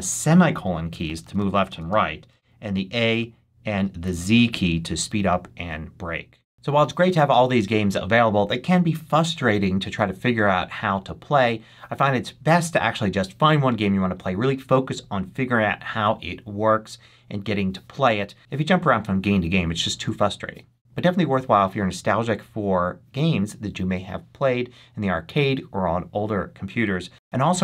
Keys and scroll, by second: 0.6 i, 0.9 l, 2.2 a, 3.9 z, 5.1 a, 6.3 l.